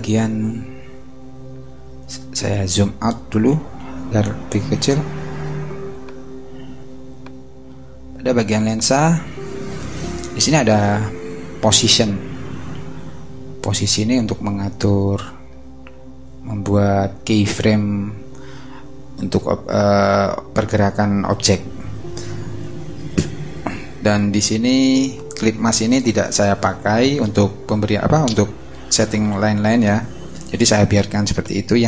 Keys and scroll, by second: 3.8 super+-.